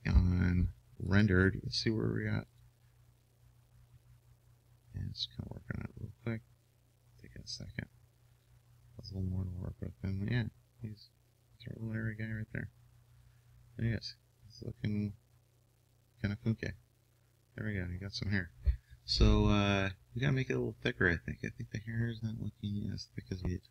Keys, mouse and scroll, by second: 21.3-23.1 middle drag.